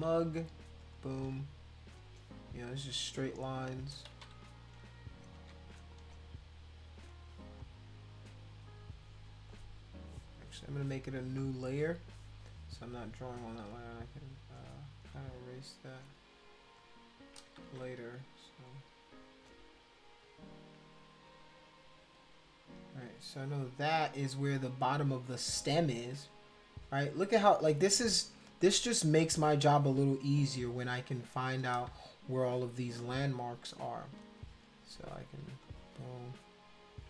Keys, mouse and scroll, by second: 0.8 shift+click, 2.0 click, 3.2 shift+click, 4.1 ctrl+z, 4.4 ctrl+z, 5.3 ctrl+z, 6.6 shift+click, 11.3 click, 13.5 click, 14.5 shift+click, 15.7 click, 16.8 shift+click, 17.6 ctrl+z, 18.5 click, 19.1 click, 20.2 shift+click, 27.1 click, 29.2 click, 35.6 click, 36.6 shift+click.